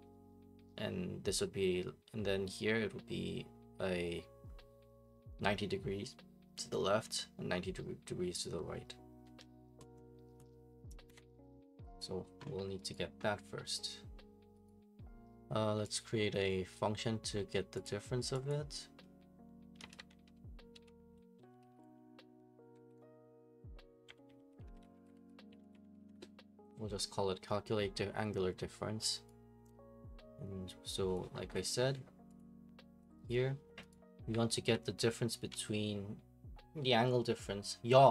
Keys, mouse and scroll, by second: 11.1 Escape, 12.0 click, 12.9 right click, 14.7 right click, 16.0 click, 17.8 click, 18.5 click, 19.5-22.7 typing, 23.8-26.5 typing, 29.3 right click, 31.5 click, 32.4 click, 33.3 click, 33.9 right click, 34.3-35.1 typing, 35.7 right click.